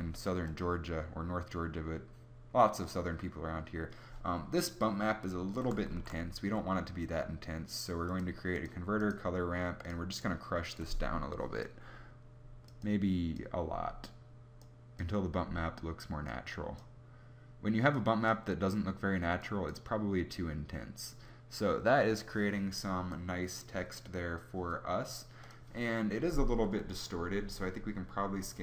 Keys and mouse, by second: 5.8 shift+a.